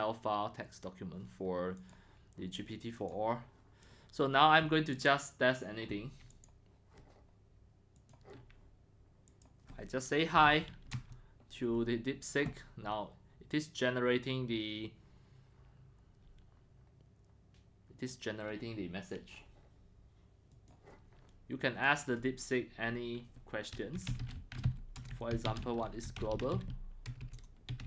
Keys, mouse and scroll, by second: 1.8 click, 2.9 click, 3.3-4.8 drag, 4.9 click, 6.3 click, 8.0 click, 9.3 click, 10.1-11.0 typing, 14.8 typing, 20.5 click, 20.7 click, 21.8 click, 23.7-27.8 typing.